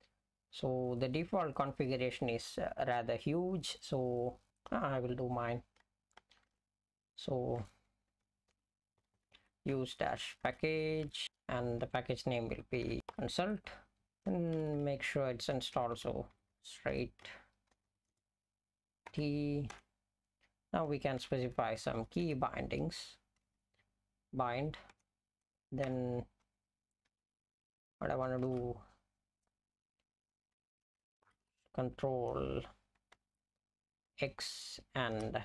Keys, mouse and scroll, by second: 6.6 ctrl+g, 8.5-19.1 typing, 19.7 Return, 21.2-23.1 typing, 24.9 Return, 25.9 Return, 27.1 (, 28.5 ", 31.3 shift+c, 33.2 -, 34.6 x, 35.1 space.